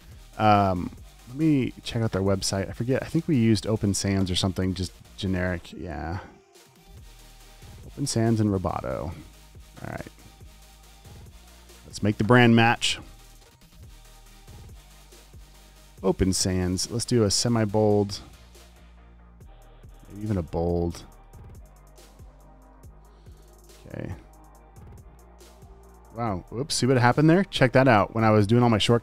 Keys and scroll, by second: 0.6 v, 9.7 Escape, 11.4 t, 11.8 super+a, 13.9-15.5 typing, 22.7 v, 23.0 Left, 23.7 t.